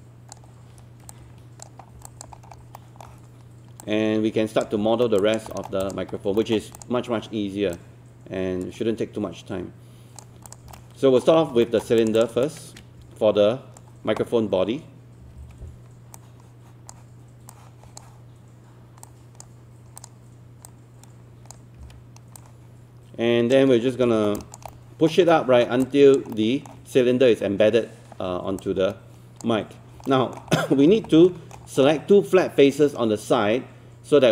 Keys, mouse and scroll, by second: 2.1 alt+click, 2.4 scroll up 1, 2.8 alt+middle click, 3.8 click, 4.9-5.2 alt+scroll up 1, 5.2 alt+click, 5.5 alt+middle click, 5.8 click, 6.1 scroll up 1, 6.4 alt+middle click, 6.8-10.5 drag, 10.8 alt+middle click, 11.7 alt+middle click, 12.0 click, 12.5-13.9 shift+right drag, 15.2 typing, 16.2-21.8 drag, 21.8 w, 22.4 click, 23.7-24.0 scroll up 1, 24.4 alt+click, 24.7 alt+middle click, 25.3 alt+middle click, 25.9 alt+click, 26.3 alt+middle click, 28.7 click, 30.1 alt+middle click, 30.5 scroll up 1, 31.3 alt+middle click, 31.7-34.3 scroll up 1.